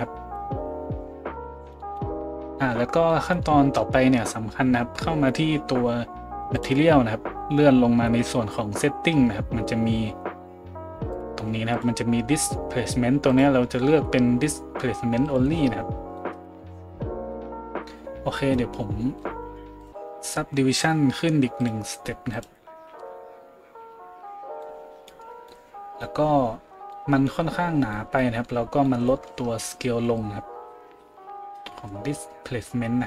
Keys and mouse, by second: 6.6-11.1 middle drag, 11.1-19.8 drag, 19.8-21.6 middle drag, 21.6-33.0 drag.